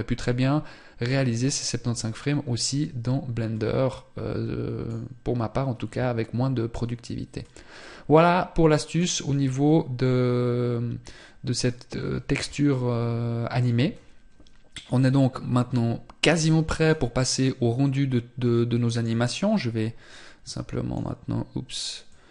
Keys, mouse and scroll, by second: 7.3 click, 15.8 click.